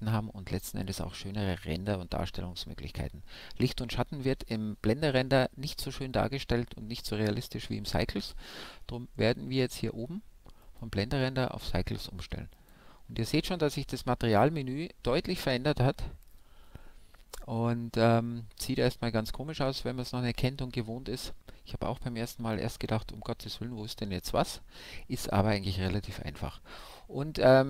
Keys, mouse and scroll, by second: 9.1-10.9 drag.